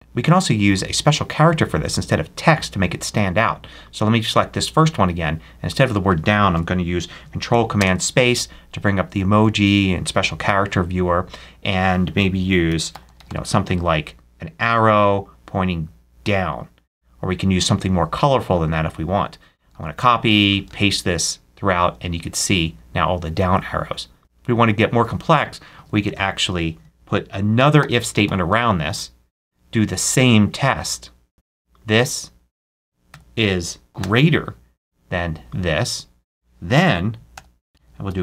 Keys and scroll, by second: 6.4 BackSpace, 7.1 ctrl+BackSpace, 7.6 ctrl+super+space, 12.3-13.6 typing, 19.6 super+c, 20.5 super+v, 25.6 super+a, 25.8 super+Left, 26.7 shift+Left, 27.2-28.6 typing, 31.3 BackSpace, 33.0 BackSpace, 33.5 shift+BackSpace, 33.9 shift+., 37.0-38.2 typing.